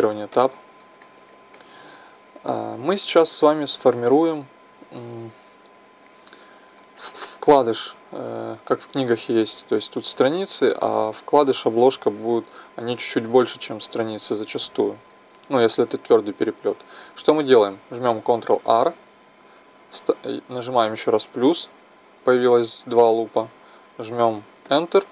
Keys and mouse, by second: 0.3 Tab, 7.0-10.8 middle drag, 13.3-15.1 middle drag, 18.6 ctrl+r.